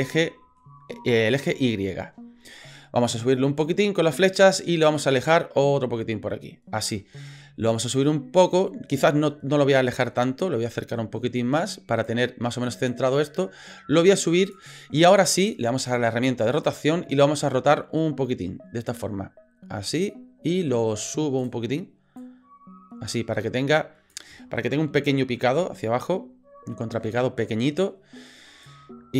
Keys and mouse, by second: 0.3 shift+middle click, 3.1-4.2 drag, 5.0-6.9 drag, 7.8-9.0 drag, 9.9-12.1 drag, 12.9-14.5 drag, 16.5 click, 17.7-19.9 drag, 21.4 click, 22.2-24.1 drag, 28.7-29.1 drag.